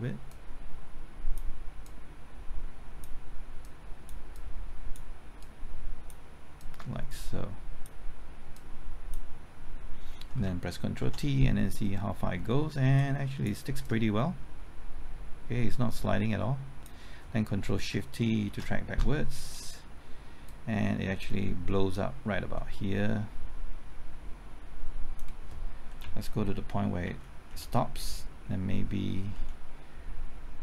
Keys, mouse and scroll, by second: 11.7 ctrl+t, 13.0-17.6 drag, 18.7 ctrl+shift+t, 20.5-25.6 drag, 26.0 Right, 27.1 Left, 27.5 Right, 28.9 Left, 29.4 Right.